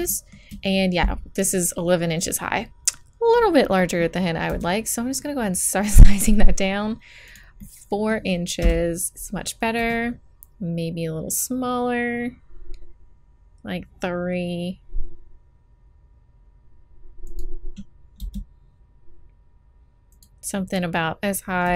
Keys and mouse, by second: 4.4 s, 7.5 click, 8.6 KP_1, 9.7 s, 18.2 g, 21.6 s.